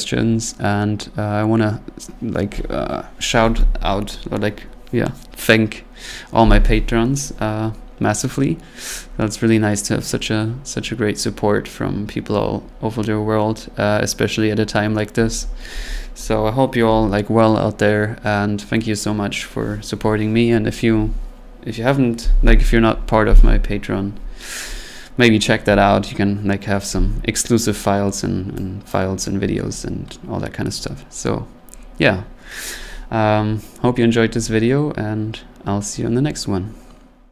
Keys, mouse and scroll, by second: 28.9-34.0 drag.